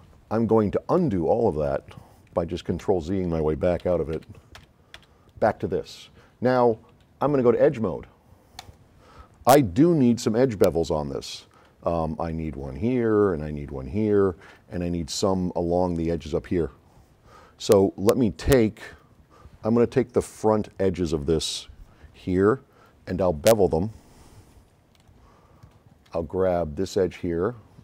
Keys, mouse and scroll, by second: 1.7 click, 2.8 x, 3.9 z, 4.6 z, 5.0 z, 8.6 click, 24.9 s, 25.0-26.3 right drag, 26.9 drag.